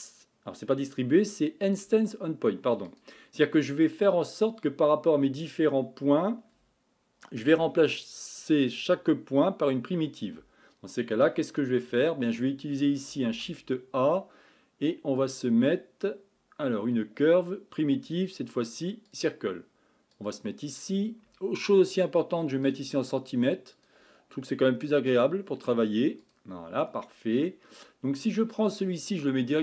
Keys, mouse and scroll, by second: 26.3-29.6 drag.